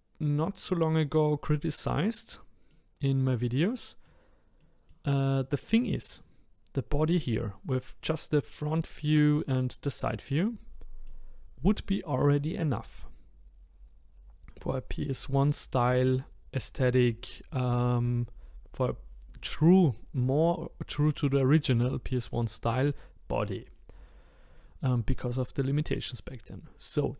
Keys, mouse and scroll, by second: 1.5-8.6 middle drag, 9.6-14.6 middle drag.